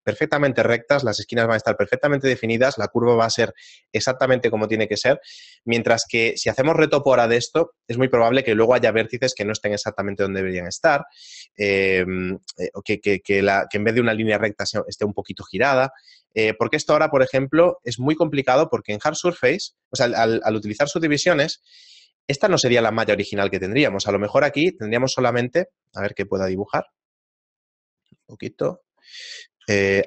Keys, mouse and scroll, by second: 20.6-21.1 scroll up 1, 21.1-22.0 scroll up 1, 22.0 scroll down 1, 22.1 scroll down 1, 23.7 right click, 25.3 shift+middle click, 28.7 middle click.